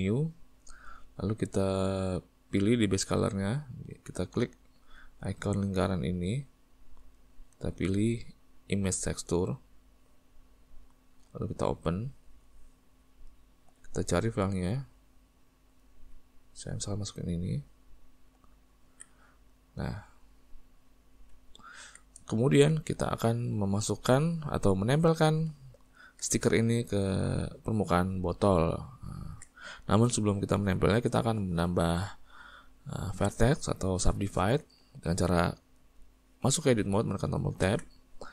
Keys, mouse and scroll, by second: 0.2-9.7 drag, 11.9-17.6 drag, 19.0 alt+a, 19.4-24.4 middle drag, 24.4 click, 24.9-34.8 middle drag, 37.8 Tab.